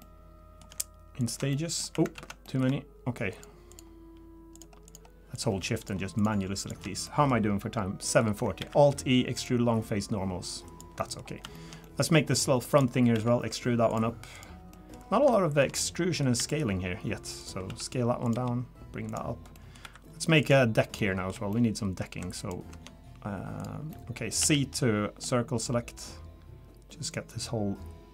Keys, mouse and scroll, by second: 0.0 middle click, 1.2 ctrl+shift+click, 1.5 middle click, 2.2 ctrl+z, 2.4 middle click, 3.3 shift+click, 4.5 shift+click, 7.0 middle click, 7.6-8.0 scroll up 1, 8.0 middle click, 8.6 alt+e, 11.0 middle click, 11.2 scroll up 2, 11.5 shift+middle click, 11.8 middle click, 12.7 click, 13.1 e, 14.3 click, 14.7 middle click, 15.0 scroll down 2, 15.0 scroll up 1, 15.0 scroll down 1, 15.3 shift+middle click, 15.8 middle click, 16.4 e, 17.7 s, 18.3 g, 19.3 scroll down 2, 19.5 middle click, 19.8 3, 20.4 click, 21.0 middle click, 21.5 shift+middle click, 22.4 ctrl+shift+click, 23.6 click, 23.9 middle click, 24.4 c.